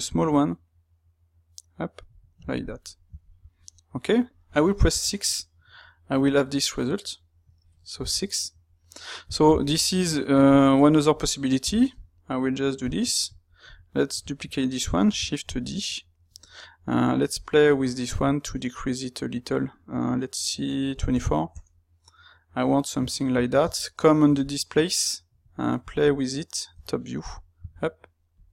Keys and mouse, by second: 3.4-10.6 middle drag, 10.7 click, 11.8 g, 13.1 click, 13.8-15.2 middle drag, 15.2 shift+d, 15.6 Escape, 16.2 space, 22.5 middle click, 26.7 KP_7.